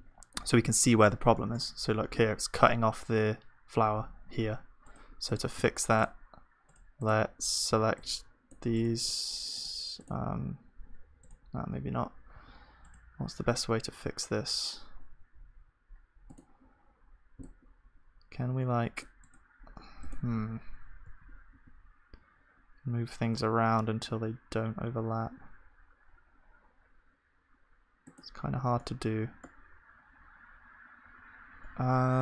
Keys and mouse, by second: 7.7-9.0 drag, 7.7 c, 9.0-10.3 right drag, 9.0 g, 10.3 g, 11.1-12.4 drag, 12.4 c.